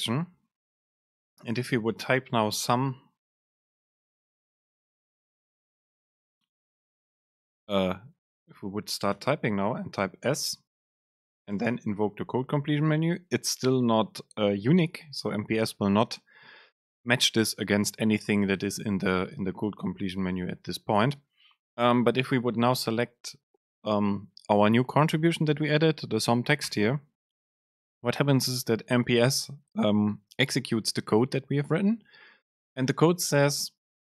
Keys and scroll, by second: 1.9 super+space, 3.2 Right, 4.0 BackSpace, 6.2 super+space, 9.3 BackSpace, 11.7 super+space.